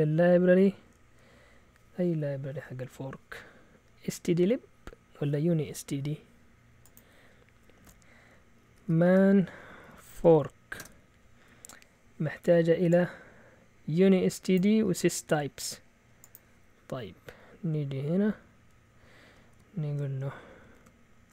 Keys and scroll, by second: 7.8-11.5 typing, 19.5 typing, 20.8-21.3 typing.